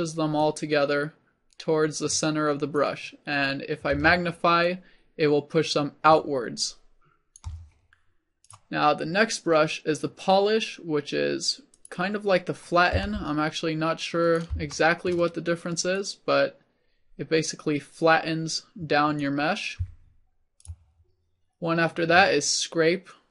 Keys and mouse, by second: 0.5 shift+middle click, 8.5-13.1 drag, 13.1 f, 20.7-23.3 drag.